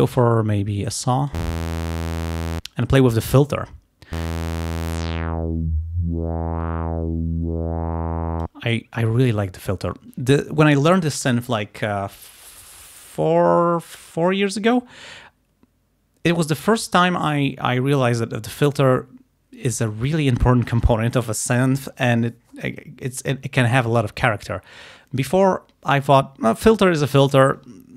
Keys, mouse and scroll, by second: 4.8-8.7 drag.